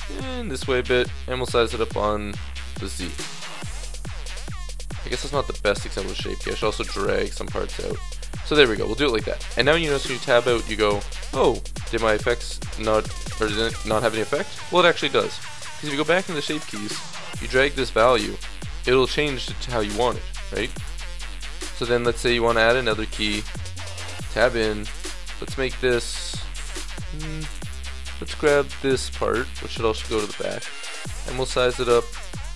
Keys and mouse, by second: 0.9 s, 3.7 middle click, 4.6 click, 5.2 a, 5.4 b, 6.3 g, 7.7 click, 8.6 Tab, 11.2 click, 15.2-18.9 drag, 22.5-23.9 drag, 23.9 Tab, 24.1 click, 25.7-26.7 middle drag, 26.2 a, 26.7 KP_1, 27.1 middle click, 27.1 click, 27.7 a, 28.0 b, 28.7 middle click, 28.9 middle click, 29.0 click, 30.3 KP_1, 31.1 s.